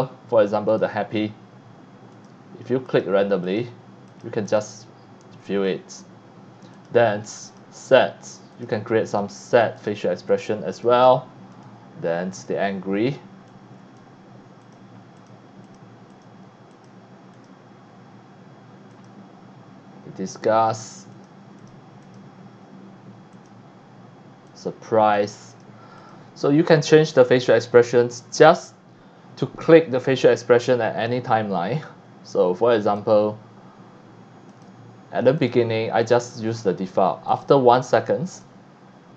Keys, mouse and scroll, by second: 0.7 click, 2.2 click, 2.9 click, 3.5 click, 4.1 click, 4.4 click, 6.7 click, 7.4 click, 8.5 click, 9.1 click, 9.8 click, 10.3 click, 10.7 click, 11.5 click, 12.3 click, 13.1 scroll down 1, 13.5 click, 13.5 x, 13.9 c, 14.6 click, 15.1 click, 15.6 click, 15.9 right click, 16.1 click, 16.7 click, 17.3 click, 18.9 click, 20.3 click, 21.1 click, 21.6 click, 22.0 click, 23.3 click, 24.5 click, 25.2 click, 25.5 click, 26.0 click, 32.9 click, 34.5 click, 35.4 click, 36.0 click, 37.3 click, 38.3 click.